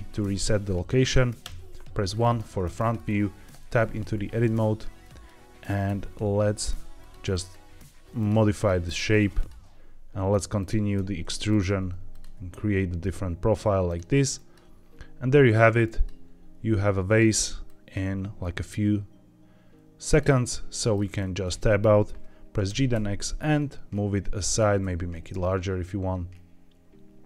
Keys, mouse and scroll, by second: 1.3 KP_1, 2.0-2.4 scroll up 3, 2.6-2.9 shift+middle drag, 2.9 shift+scroll down 2, 3.4 Tab, 4.9 click, 5.8 g, 6.9 click, 7.2 click, 7.6 g, 8.1 click, 8.4 click, 8.7 g, 9.3 click, 9.4 g, 10.5 click, 10.9 e, 11.4 click, 11.6 e, 12.0 click, 12.2 e, 13.8 click, 14.3 click, 14.6 g, 15.3 click, 15.8 click, 16.1 g, 17.0 click, 17.6 click, 18.0 g, 20.0 click, 20.7 middle click, 20.9-21.4 scroll down 3, 21.4 Tab, 21.6 middle click, 22.6 g, 22.8 x, 24.3 click, 24.7 s.